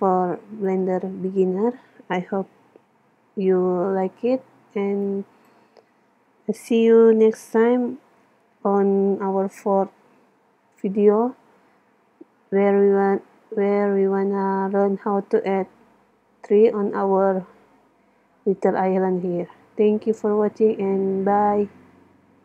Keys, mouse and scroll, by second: 5.1-6.8 drag.